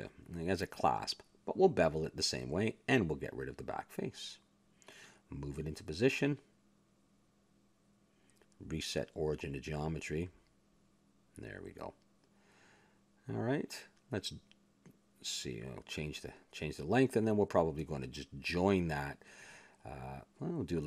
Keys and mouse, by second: 0.7 a, 0.9 ctrl+Tab, 1.6 click, 2.1 ctrl+b, 3.3 a, 3.4-5.5 drag, 5.1 x, 6.0 a, 6.7 click, 6.9 s, 7.6 Tab, 8.7 click, 11.1-12.2 middle drag, 12.2 click, 13.1 middle click, 13.2 a, 13.5-15.1 middle drag, 15.1 click, 15.3 Tab, 15.8 a, 16.1 a, 16.3 middle click, 16.7 s, 17.9 a, 18.1 Tab, 19.0 a.